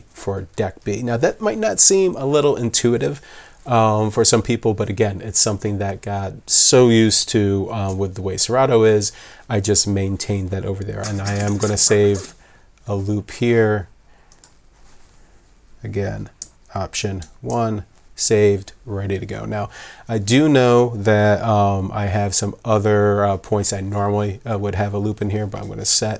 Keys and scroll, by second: 17.2 alt+1.